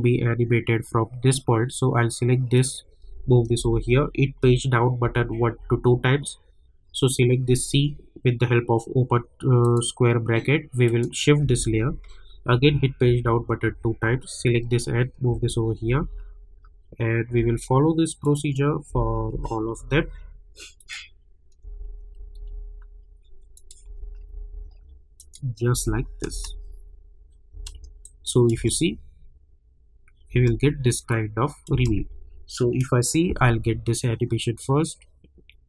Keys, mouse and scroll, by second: 0.0 click, 2.5 click, 3.5 [, 4.4 Page_Down, 6.9 click, 9.6 click, 11.4 [, 12.5 Page_Down, 14.3 click, 15.3 [, 15.8 Page_Down, 18.2 click, 19.3 Page_Down, 20.8 click, 21.6 [, 22.2 Page_Down, 23.5 click, 23.8 [, 24.3 Page_Down, 25.1 click, 25.7 [, 26.3 space, 28.0 click, 28.5 space, 31.1 click, 31.7 space.